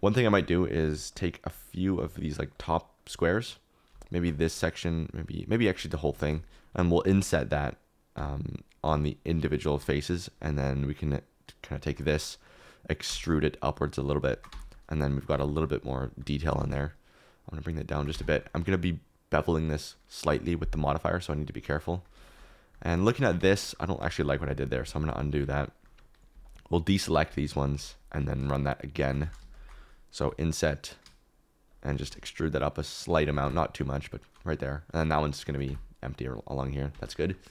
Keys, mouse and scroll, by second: 0.2 shift+middle click, 7.0 i, 8.1 i, 8.8 i, 13.0 e, 14.5 Tab, 15.3 Tab, 16.3 g, 16.5 z, 17.9 shift+right click, 18.1 Tab, 21.3 KP_Decimal, 23.0 shift+middle click, 23.3 Tab, 24.0 ctrl+z, 24.2 ctrl+z, 24.3 ctrl+z, 24.5 ctrl+z, 24.6 ctrl+z, 24.8 ctrl+z, 25.0 ctrl+z, 25.1 ctrl+z, 25.8 middle click, 27.1 middle click, 27.5 ctrl+click, 29.2 ctrl+z, 30.2 i, 31.9 e, 33.4 Tab, 35.6 Tab, 36.9 Tab, 37.1 middle click.